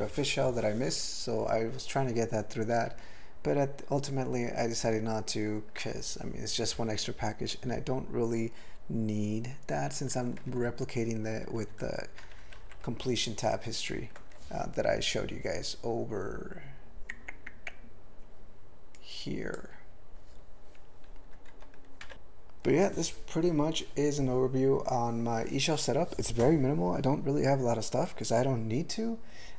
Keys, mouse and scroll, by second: 2.9 q, 4.8 ctrl+a, 10.4 ctrl+p, 10.6 ctrl+p, 10.9 ctrl+e, 11.4 ctrl+p, 11.6 ctrl+e, 12.3 ctrl+n, 12.5 ctrl+n, 12.6 ctrl+n, 12.9 ctrl+a, 19.0 click, 19.5 click, 21.5 ctrl+g, 22.0 ctrl+v, 22.1 Tab.